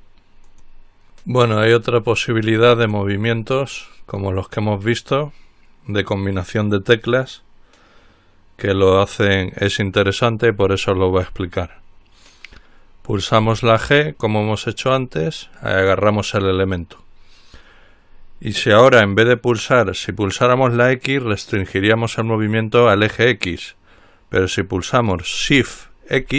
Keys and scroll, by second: 13.8 g.